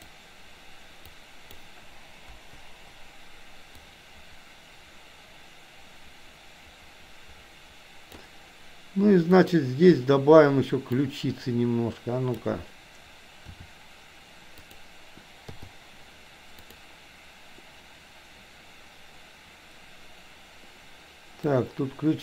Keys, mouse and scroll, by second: 1.1-1.6 drag, 2.3 Delete, 3.8-8.2 drag, 9.3 click, 10.8-12.3 drag, 13.6 r, 15.6 i, 16.6 click, 21.4-22.2 drag.